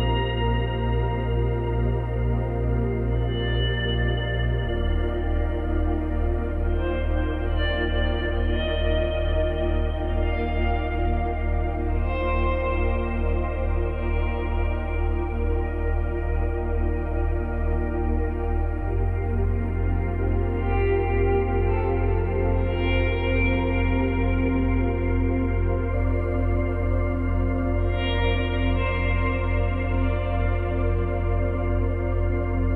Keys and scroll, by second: 7.4 space.